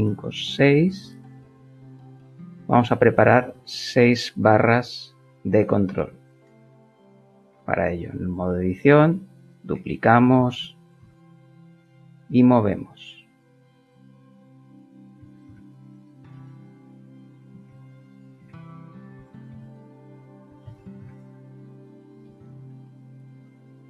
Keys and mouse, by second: 0.4 middle click, 1.4 middle click, 3.0 Tab, 5.1 click, 5.8 Tab, 6.6 shift+middle click, 9.0 shift+d, 9.8 d, 10.6 g, 11.0 x, 15.5 KP_5, 16.3 Return, 17.7-21.0 typing, 22.1 Return, 22.7 shift+middle click.